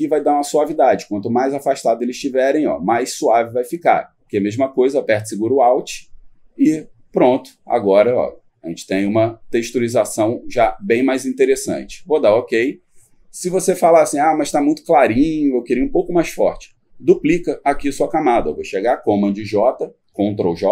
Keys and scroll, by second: 19.4 ctrl+j.